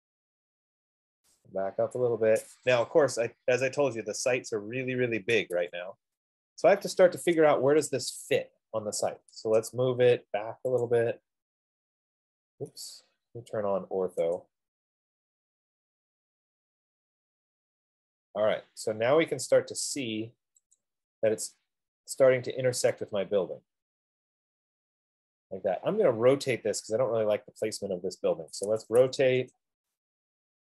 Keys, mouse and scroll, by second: 0.0-1.3 typing, 0.5 scroll down 1, 0.6 scroll down 4, 0.8-1.2 scroll, 2.6 right click, 2.8-3.6 scroll, 3.3-4.1 typing, 5.6 right click, 5.7 Escape, 6.9 middle click, 7.1 middle click, 8.4 click, 9.4-9.8 typing, 11.2 click, 14.8 click, 18.1 F15, 21.0 click, 21.8 scroll, 22.6 scroll, 25.2 scroll up 5, 27.1 right click, 27.6 scroll down 3, 29.2-30.4 typing, 30.1 Return.